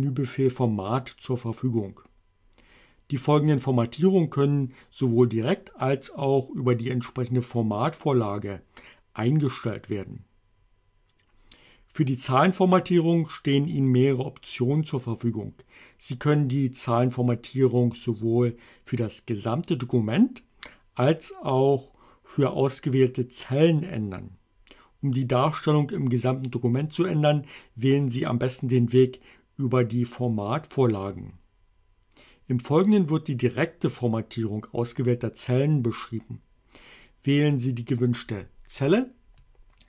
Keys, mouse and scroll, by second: 38.8 click, 39.4-39.8 drag.